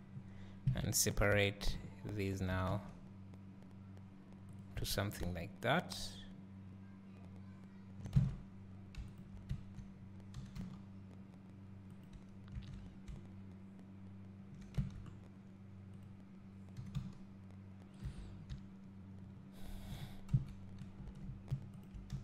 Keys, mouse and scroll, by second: 0.7 KP_Decimal, 2.5 g, 4.9 Tab, 5.1 scroll down 1, 8.1 Tab, 9.1 shift+click, 10.5 g, 12.9 scroll down 1, 14.8 Tab, 16.0 click, 16.9 g, 18.1 Tab, 18.3 Tab, 18.3 scroll down 1, 20.3 KP_1, 21.1 Tab, 21.9 shift+click, 22.1 s.